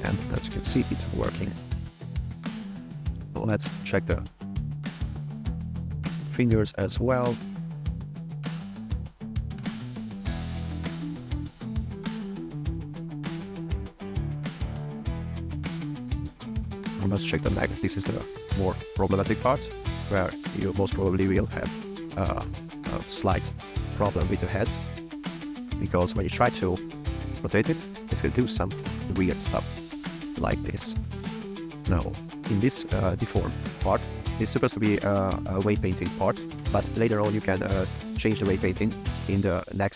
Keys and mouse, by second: 0.3 click, 0.6 r, 1.0 click, 1.4 r, 2.1 drag, 3.9 click, 4.4 r, 5.1-5.9 drag, 6.0 r, 7.3 r, 7.7 click, 8.4 click, 8.9 r, 9.3 click, 10.2 r, 11.6 click, 12.0 r, 12.5 click, 13.4 r, 14.7 click, 15.5 click, 17.0 r, 17.5-17.9 right drag, 17.9 r, 19.5 click, 19.6 drag, 20.2 r, 22.0 shift+click, 22.3-23.4 drag, 23.4 a, 23.8 alt+r, 24.0 alt+g, 24.8 shift+click, 25.5 r, 26.1 r, 26.2 z, 28.9 r, 29.3 z, 31.7 click, 32.4 drag.